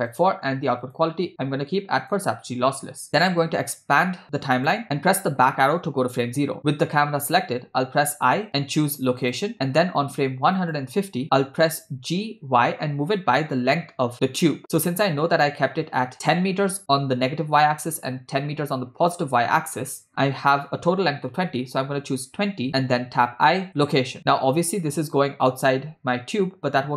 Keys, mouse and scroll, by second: 0.9-2.4 drag, 3.2-4.7 drag, 5.6 Left, 10.8 click, 12.0 g, 23.2 i, 25.1 click, 25.9 space.